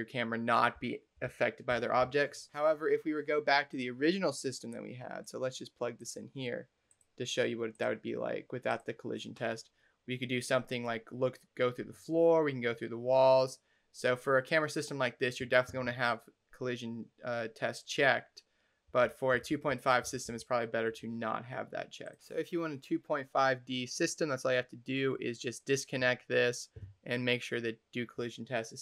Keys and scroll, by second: 0.6 s, 1.1 a, 1.5 s, 18.5-20.6 typing.